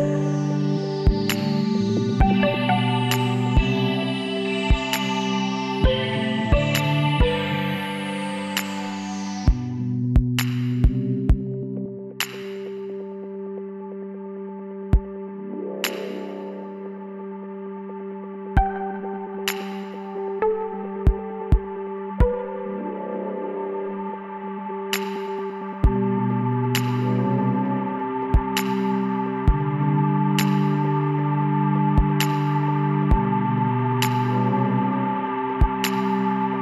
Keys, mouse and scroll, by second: 0.9 click, 1.8 middle click, 2.3 KP_1, 3.6-5.3 drag, 6.5-8.3 drag, 8.3-9.7 middle drag, 9.7 click, 11.5 right click, 12.2-15.5 middle drag, 14.7 click, 15.5 right click, 15.5 w, 24.2-26.9 drag, 25.2-27.6 middle drag, 25.6-26.9 right drag, 27.6-29.4 right drag, 28.1-29.4 drag, 28.1-31.5 middle drag, 31.5-33.2 drag, 33.2 e, 35.5 e.